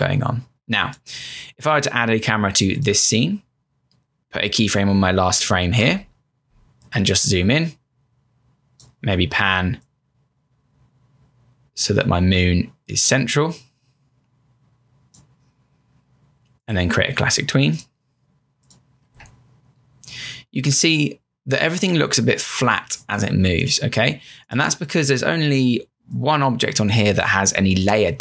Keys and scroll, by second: 5.8 F6, 20.8 Return.